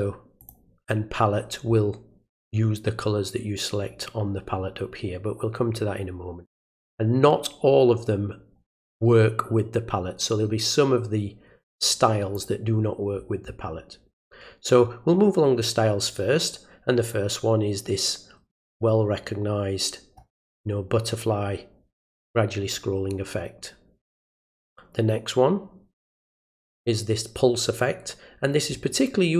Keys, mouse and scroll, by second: 0.4 click, 12.3 click, 24.5-26.0 drag.